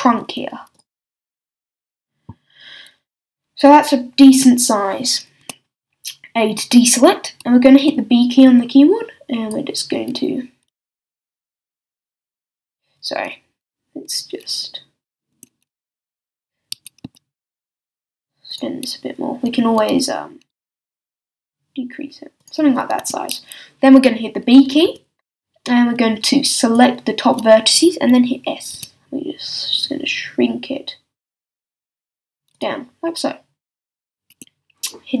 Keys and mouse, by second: 2.2 click, 5.4 a, 7.8 b, 12.6 a, 15.3 a, 16.7 s, 18.8-20.5 drag, 20.5 s, 22.5-24.8 drag, 23.0 a, 24.8 b, 28.7 s, 32.6-35.2 drag, 34.3 a.